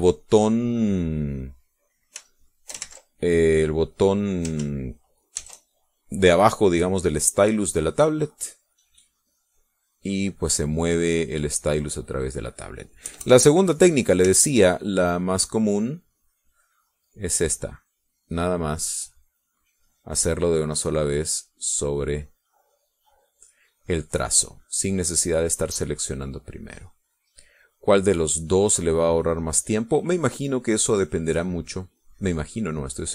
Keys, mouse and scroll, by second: 0.0 shift+middle click, 3.4 shift+click, 3.9 ctrl+shift+z, 6.4 ctrl+shift+z, 8.3 middle click, 10.4 click, 10.8-13.3 drag, 13.4 middle click, 14.1 KP_Add, 14.5 middle click, 15.4 shift+click, 16.0-23.0 shift+drag, 23.3-24.5 drag, 25.1 click, 26.1-31.0 drag, 31.3-33.1 drag.